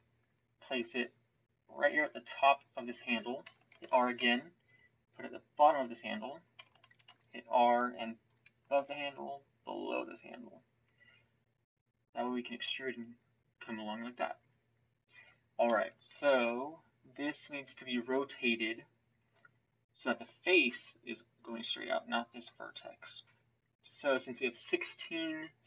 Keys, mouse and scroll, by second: 3.7 ctrl+r, 7.0 ctrl+r, 15.6 KP_7.